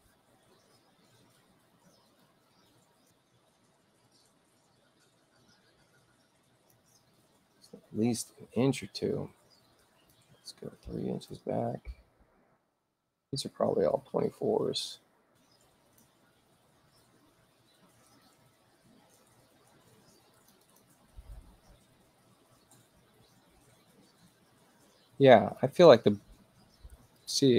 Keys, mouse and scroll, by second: 2.1-6.7 drag, 8.6-10.1 drag, 9.8 Return, 11.3 3, 11.4 Return, 12.6 click, 13.5-16.0 drag, 20.3 click, 20.6 click, 25.6 click, 27.2 click.